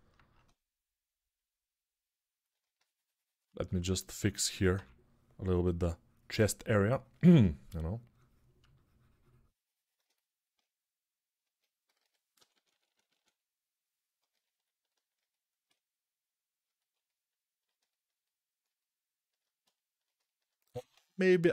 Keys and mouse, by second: 2.0-15.0 ctrl+drag, 4.5 p, 11.7-12.9 typing, 19.8-21.5 alt+shift+drag, 20.8 alt+q.